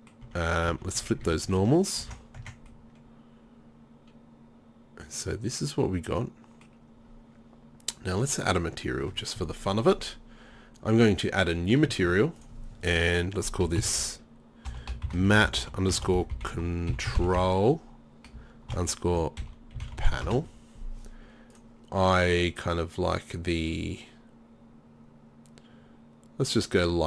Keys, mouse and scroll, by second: 0.3 Tab, 0.7 a, 1.0 a, 1.3 a, 2.0 ctrl+n, 2.4 Tab, 7.0-13.7 drag.